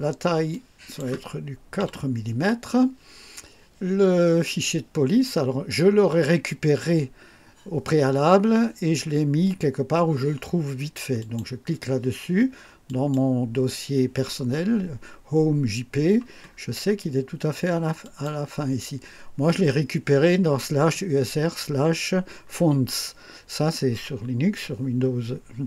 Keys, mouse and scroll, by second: 0.5 click, 1.8 4, 11.2 click, 12.8 click, 16.4-16.7 scroll down 1, 18.0 click.